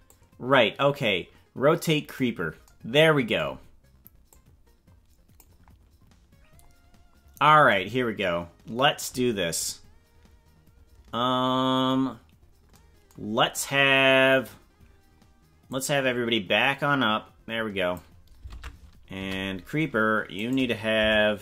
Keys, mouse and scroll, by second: 0.0-2.2 drag, 4.3-5.4 drag, 6.6-7.0 scroll up 5, 12.3-12.6 scroll down 4, 15.8-18.0 drag, 18.6 ctrl+Tab, 19.2 a, 20.3 right click, 21.0 Delete.